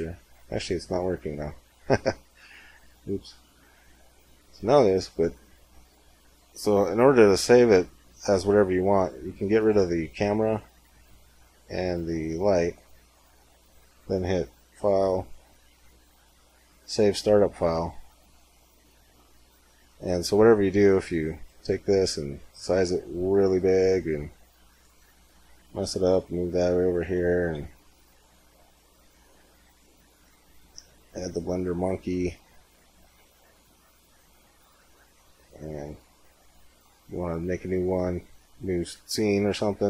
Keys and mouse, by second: 3.6 middle click, 5.9-7.8 drag, 7.8-9.4 middle drag, 9.4-10.8 right drag, 10.0 x, 11.9 x, 19.7-21.5 middle drag, 21.5 s, 23.8-26.7 middle drag, 25.4 g, 27.4 shift+a, 30.7 s, 31.9 middle click, 32.4 g, 33.3 r, 34.3 z, 35.0 z.